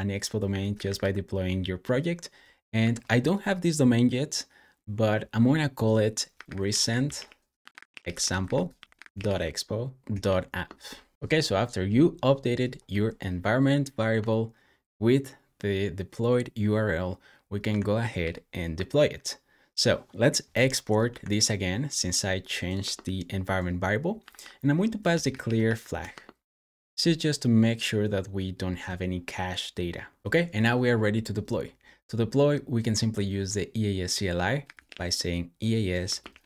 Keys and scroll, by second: 0.1-1.3 typing, 2.6 typing, 6.1-9.6 typing, 10.1 super+s, 17.5 super+w, 18.1 super+j, 22.6 space, 24.1-26.5 typing, 34.2-36.4 typing.